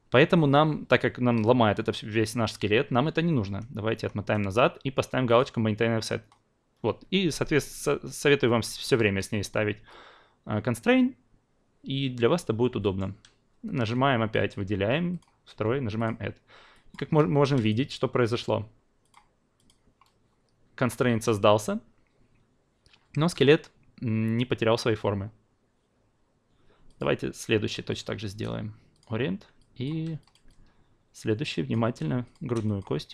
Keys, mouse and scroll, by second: 3.4 ctrl+z, 3.8 ctrl+z, 5.2 click, 12.8 alt+middle click, 14.3 click, 15.9 click, 17.6 click, 19.0 click, 19.5 click, 26.9 click, 27.9 shift+click, 28.9 click, 29.6 alt+click, 30.2-31.7 alt+drag.